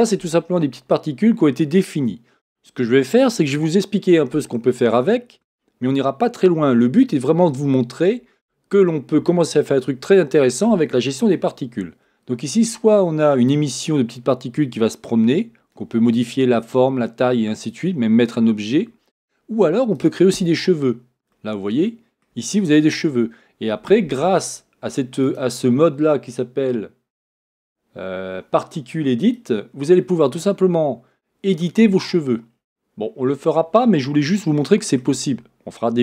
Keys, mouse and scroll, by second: 19.9 click, 20.6-21.3 scroll down 1, 21.3-25.2 middle drag, 22.5-25.2 scroll up 1, 25.2-34.4 drag, 32.5-33.0 scroll down 1, 33.0-33.7 scroll up 2, 33.7-34.4 scroll up 1, 34.4-36.0 shift+middle drag.